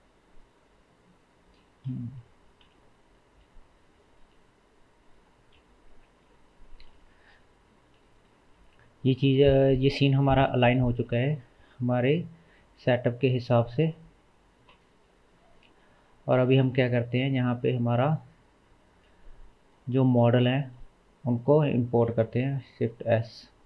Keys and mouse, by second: 2.6 KP_7, 5.6 KP_3, 9.4 KP_0, 12.5-21.5 shift+middle drag, 13.8 KP_0, 14.7 KP_0, 21.5-22.1 drag, 22.1-23.6 shift+middle drag, 22.4 shift+s.